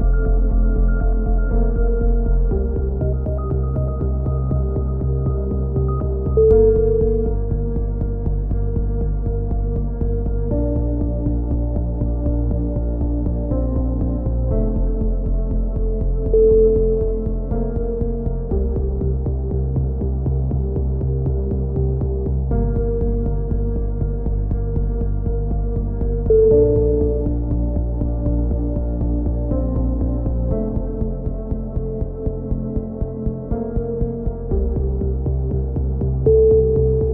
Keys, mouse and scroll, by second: 2.9 click, 3.3 c, 4.0 click, 4.6 g, 8.8 a, 8.9 z, 9.1 click, 9.7 k, 12.6 a, 12.8-14.4 drag, 14.8 click, 16.3 right click, 16.3 x, 17.0 middle click, 17.2 a, 17.5 KP_3, 17.8 z, 20.7 right click, 21.8 g, 26.7 a, 27.0 z, 27.3-28.5 middle drag, 29.2 click, 30.6 right click, 31.0 alt+m, 31.3 middle click, 31.6 a, 32.0 Tab, 36.7 middle click, 36.9 Tab.